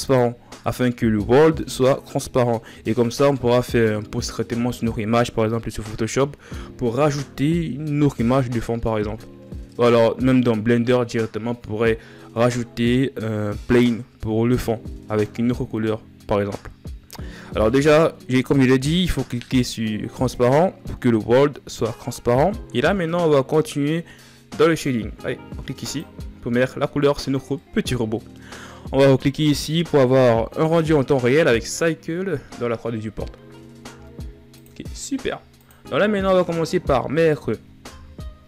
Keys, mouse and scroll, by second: 23.4-25.7 middle drag, 25.7 click, 26.7-27.1 scroll down 4, 27.3-29.3 middle drag, 29.3 click, 37.0 middle click, 37.8 KP_1.